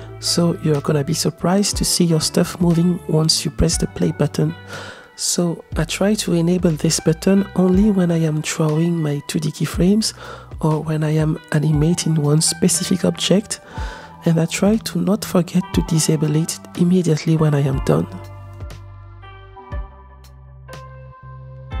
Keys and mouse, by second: 2.2-4.2 drag, 4.7 z, 5.2 ctrl+z, 5.7 ctrl+z, 6.5-7.9 drag, 9.2 ctrl+Tab, 11.1 click, 12.7 click, 14.2-15.4 drag, 16.0-16.9 drag, 17.4 click, 17.9-20.3 drag, 20.7-21.8 middle drag.